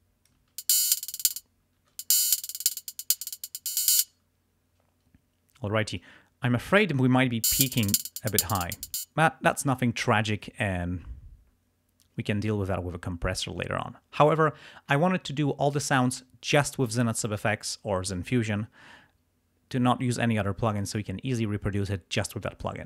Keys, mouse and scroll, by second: 0.5 click, 0.5 space, 1.3 space, 2.3 click, 3.9 space, 6.0 click, 7.2 space, 8.9 space.